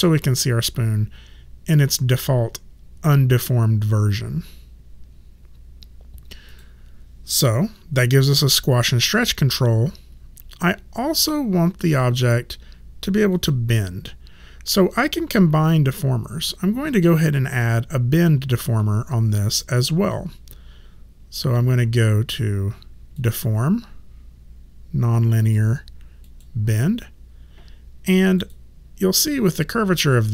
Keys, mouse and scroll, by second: 6.5 click, 13.3 click, 23.2 click, 26.2 click, 28.4 click, 30.1 middle click.